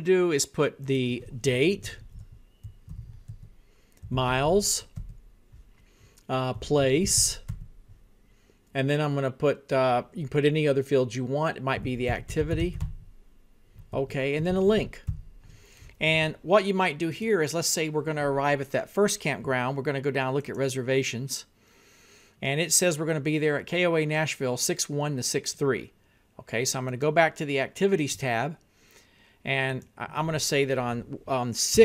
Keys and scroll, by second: 2.0-5.0 typing, 6.4-7.8 typing, 11.7-13.4 typing, 14.0 Tab, 14.9 l, 15.7 i, 16.6 n, 17.4 k, 31.5-31.8 typing.